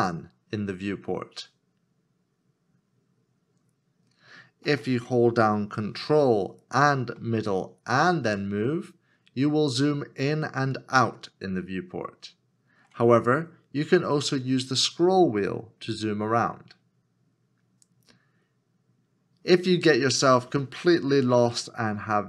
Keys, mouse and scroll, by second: 7.1 ctrl+middle click, 14.4 scroll down 1, 15.1 scroll up 1, 15.8 scroll down 1, 16.3 scroll up 1, 20.6 shift+middle click, 22.1 ctrl+middle click.